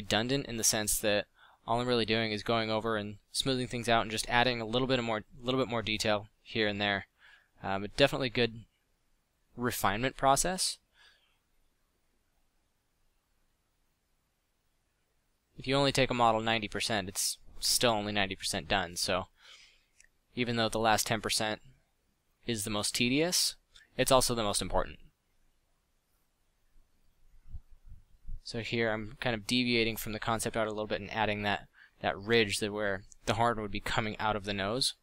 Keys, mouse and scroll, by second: 1.2 f, 8.5 drag, 8.7 middle drag, 8.8-9.4 drag, 11.4-12.2 middle drag, 15.6 f, 18.1-20.7 middle drag, 22.2-24.4 middle drag, 25.4 f, 27.2 f, 31.6 f, 33.9 middle click.